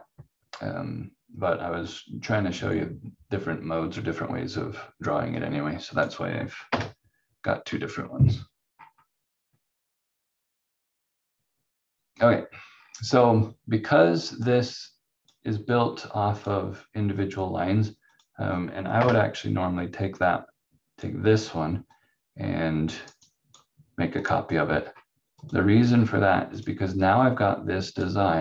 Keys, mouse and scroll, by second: 5.3 click, 6.7 Delete, 8.2-8.7 scroll down 1, 8.7-9.7 scroll up 1, 12.7 scroll down 1, 14.4 click, 18.9 Delete, 20.1 click, 23.0 right click, 24.6-25.7 scroll up 1, 25.9-26.8 scroll down 1, 27.2 click, 28.3 scroll down 1.